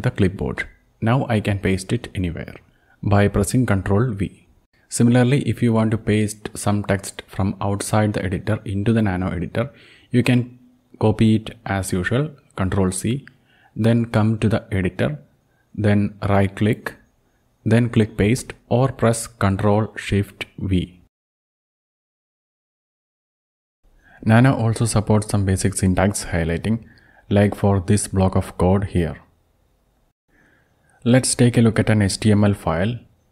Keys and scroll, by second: 0.5 ctrl+shift+c, 2.8 ctrl+v, 10.1 ctrl+c, 13.2 Return, 13.4 Return, 20.6 ctrl+shift+v, 22.5 ctrl+Down, 22.7 ctrl+Down, 22.8-23.3 ctrl+Down, 23.5 ctrl+Down, 29.4 ctrl+x, 30.6-31.4 typing.